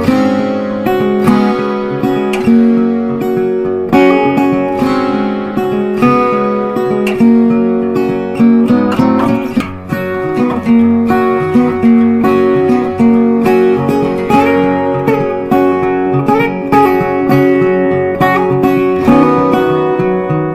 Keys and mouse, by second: 1.4 right click, 4.7 click, 4.7 click, 7.1 click, 9.3 click, 9.4 click, 11.5 click, 12.9 click, 13.8 click, 16.0 click, 18.3 click.